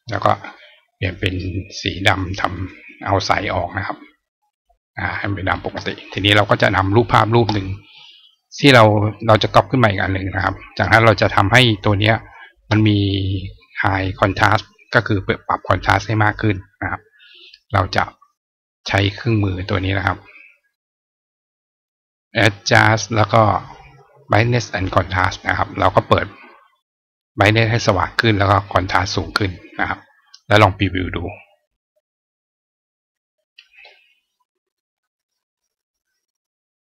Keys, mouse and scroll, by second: 0.9 click, 2.4 click, 4.1 click, 6.3 click, 8.1 click, 9.2-10.2 drag, 10.1 right click, 11.7 click, 13.7-14.6 drag, 15.8 click, 19.4 click, 21.7 click, 24.5 click, 27.0 click, 28.2 click, 30.5 click.